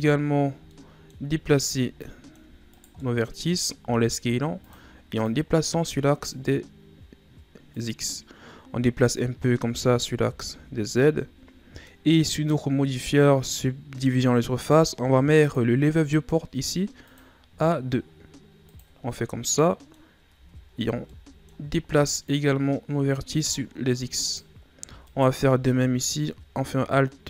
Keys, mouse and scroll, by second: 0.7 middle click, 1.6 shift+right click, 2.0 middle click, 2.7 shift+right click, 3.0 middle click, 3.8 s, 5.3-9.2 drag, 9.2-10.0 scroll down 6, 9.7 Tab, 10.0-10.5 middle drag, 10.5 a, 11.0-12.1 middle drag, 12.1-13.1 scroll up 5, 15.4-19.1 drag, 19.1-20.3 middle drag, 20.3 scroll up 1, 20.3 Tab, 20.9 shift+scroll down 2, 21.1-22.3 middle drag, 22.3-24.2 drag, 24.2 right click, 25.0 alt+right click, 26.0 click.